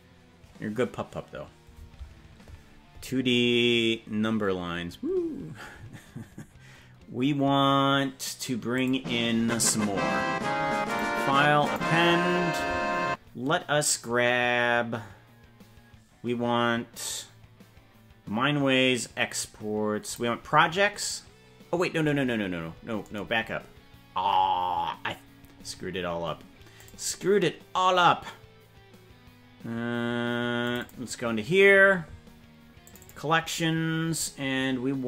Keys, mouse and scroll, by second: 8.7 click, 10.9 click.